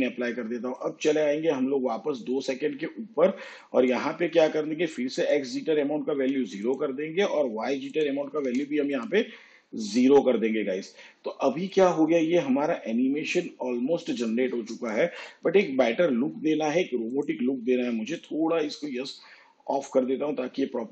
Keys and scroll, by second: 6.3 0, 8.5 0, 15.7 shift+/.